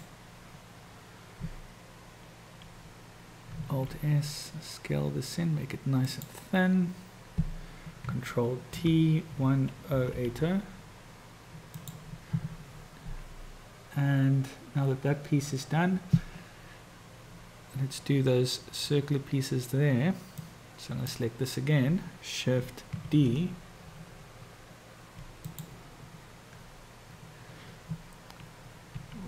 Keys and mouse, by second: 3.7 alt+s, 8.8 ctrl+t, 20.5 click, 23.3 shift+d, 28.9 r.